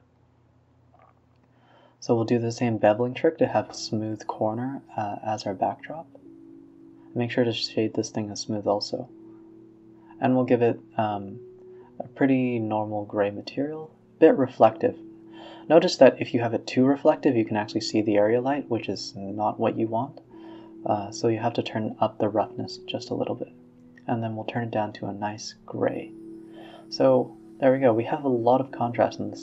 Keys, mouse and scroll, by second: 0.5 click, 2.2 ctrl+b, 3.0 Tab, 5.3 scroll up 2, 5.4 z, 5.9 middle drag, 6.1 scroll up 1, 6.4 middle drag, 6.7 z, 7.2 a, 7.3 a, 8.1 click, 9.1 scroll down 1, 9.3 right click, 9.9 right click, 10.5 click, 11.3 click, 12.3 KP_0, 13.2-15.0 drag, 16.4 click, 17.4-19.2 drag, 23.9 click, 26.0 a, 26.6-27.1 scroll up 3, 27.9-28.3 scroll down 1.